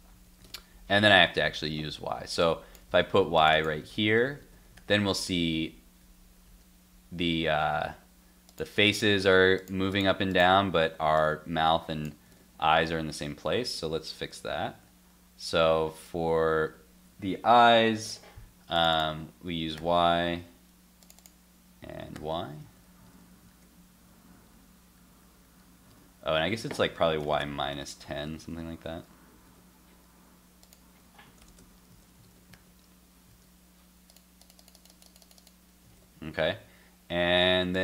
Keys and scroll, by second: 0.4 super+Tab, 1.1 super+s, 2.9 super+c, 3.8 super+v, 4.2 super+s, 4.4 super+Tab, 5.5 super+r, 6.0 super+r, 7.7 alt+Tab, 12.3 super+Tab, 14.8 super+s, 20.3 super+s, 22.6 super+s, 23.1 super+Tab, 23.5 super+r, 24.5 super+r, 25.2 super+r, 27.7 super+s, 28.1 super+Tab, 28.4 super+r, 29.5 super+Tab, 31.9 super+s, 32.2 super+Tab, 32.5 super+r, 33.3 super+r, 35.9 super+Tab.